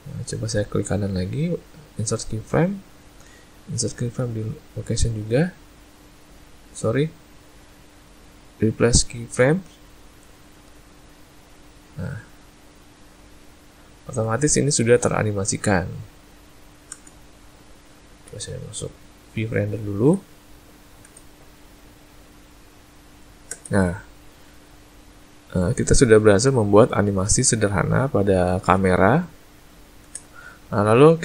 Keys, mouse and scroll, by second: 1.3 right click, 4.1 right click, 7.6 right click, 11.7 click, 14.3 space, 16.9 space, 18.3 z, 21.1 space, 23.5 space, 25.6 click, 30.1 space.